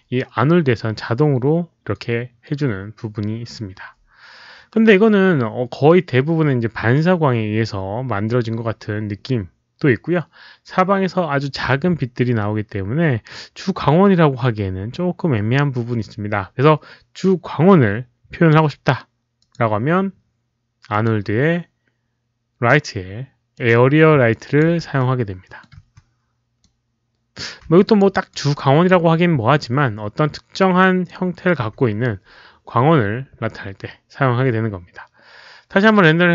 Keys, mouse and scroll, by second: 19.3 click, 20.9 click, 23.5 click, 24.3 alt+click, 24.7 w, 24.9 middle click, 25.0 w, 26.3-27.1 typing, 26.6-27.3 alt+drag, 26.6 middle click, 27.7 alt+click, 28.1 alt+right click, 28.5 alt+click, 29.3 e, 30.5 alt+click, 31.6 q.